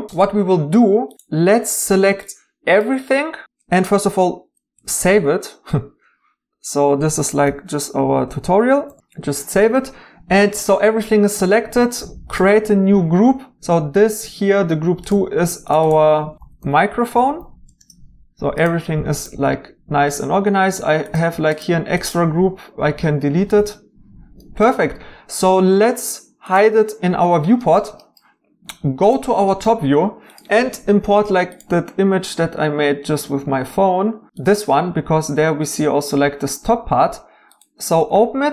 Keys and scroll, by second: 7.4-9.3 typing, 16.1-16.8 typing, 17.8 Return, 22.9 Delete.